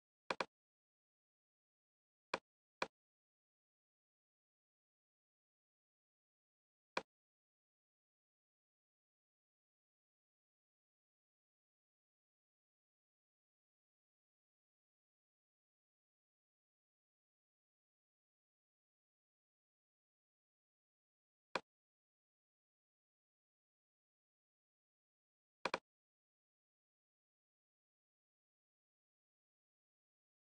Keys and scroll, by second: 23.3 Down.